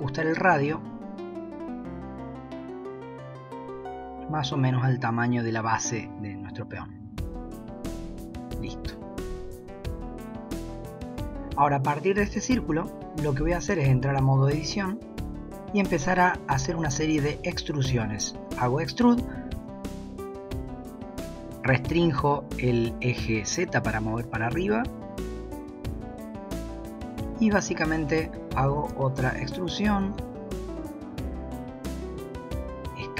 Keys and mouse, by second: 10.2 drag, 12.2 Tab, 17.3 e, 26.1 click, 28.4 e, 31.1 s.